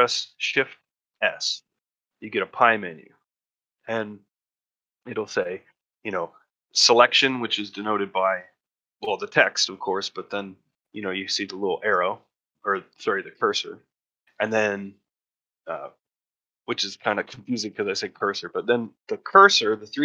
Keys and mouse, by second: 1.0 shift+s.